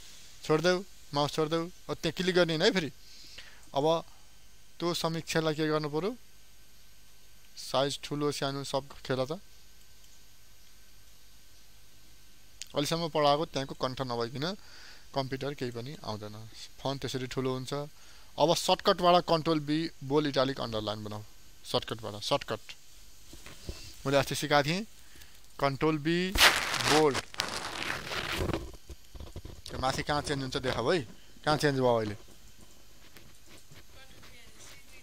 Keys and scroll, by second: 29.7 ctrl+b.